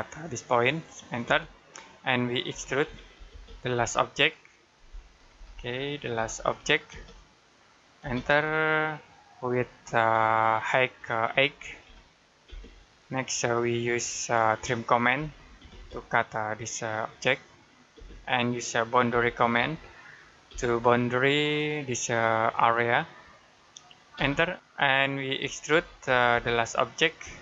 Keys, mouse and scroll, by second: 1.1 space, 2.3-6.7 typing, 8.7 shift+middle click, 12.3 space, 12.8-13.6 scroll up 1, 13.6 middle click, 14.2-14.7 scroll up 1, 15.0-15.4 typing, 17.1 click, 17.8 space, 18.3 middle click, 19.0 typing, 20.3 space, 21.4 click, 24.0 space, 25.3 e, 26.2 space.